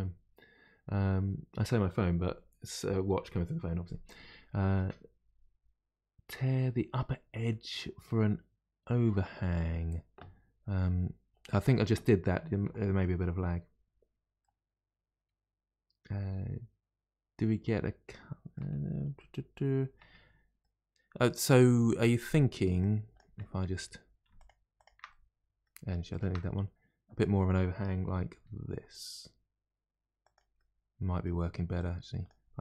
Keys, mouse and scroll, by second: 14.4-17.5 middle drag, 18.7 scroll down 2, 19.1-20.2 middle drag, 20.2-20.6 scroll down 1, 20.6-22.8 middle drag, 22.8 click, 23.3-24.3 middle drag, 24.3 shift+click, 24.7 shift+click, 25.0-26.0 middle drag, 26.0 shift+click, 26.4-28.3 middle drag, 28.3 g, 30.5-31.7 middle drag, 31.7 click, 32.4 g.